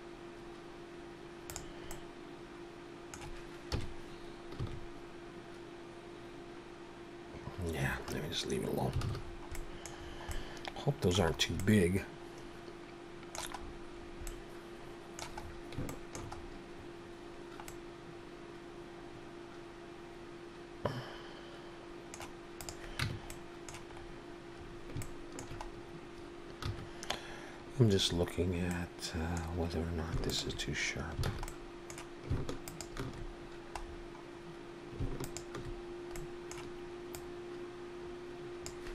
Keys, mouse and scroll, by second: 1.9 middle click, 3.6 KP_1, 4.6 r, 9.0 alt+a, 9.2-10.3 scroll down 7, 9.5 middle click, 10.3 middle click, 11.4 scroll up 2, 11.6 middle click, 13.6-14.3 scroll up 5, 14.3 middle click, 15.4-15.8 scroll up 2, 15.9 shift+middle click, 16.4-17.0 scroll up 1, 17.0 scroll up 1, 17.6 scroll down 1, 17.7 middle click, 22.6 click, 23.1 Tab, 23.3 middle click, 24.0-24.6 scroll up 1, 24.6-25.0 scroll up 3, 25.0 shift+middle click, 25.7 scroll up 1, 26.6 2, 28.7 middle click, 30.3 alt+shift+click, 31.3 alt+a, 31.5 middle click, 32.6 alt+shift+click, 33.9-34.5 scroll down 4, 35.2 alt+shift+click, 36.2 middle click, 37.2 click.